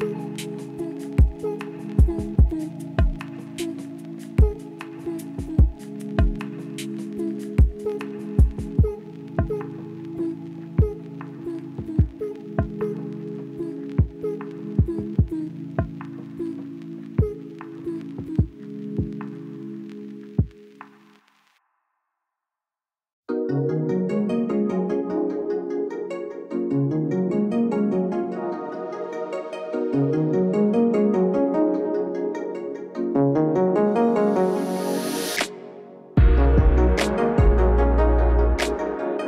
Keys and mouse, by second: 0.5 KP_0, 4.0 alt+shift+z, 4.3 alt+shift+z, 5.7 alt+shift+z, 6.2 alt+a, 6.4 z, 7.1 z, 7.8 ctrl+alt+KP_0, 8.6 ctrl+b, 9.9 click, 10.4 click, 11.1 click, 11.3 click, 11.7 n, 12.8 click, 13.0 z, 13.7 alt+shift+z, 15.6 click, 16.7 click, 17.1 KP_0, 20.0 middle click, 20.7 middle click, 21.8 click, 22.5 alt+shift+z, 23.5 shift+click, 25.4 click, 27.6 click, 29.5 shift+click, 31.9 click, 34.2 click, 35.3 click, 36.8 click, 39.0 z.